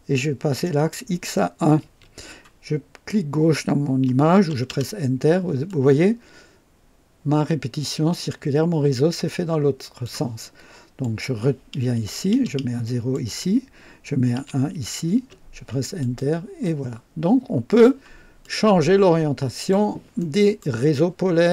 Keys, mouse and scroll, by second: 0.6 click, 1.7 KP_1, 4.6 Return, 5.6-10.2 drag, 11.0 click, 12.2 KP_0, 12.4 KP_0, 13.1 click, 14.3 KP_1, 15.1 Return, 15.9 click, 16.6-18.0 drag, 18.4-19.8 drag, 20.1 right click.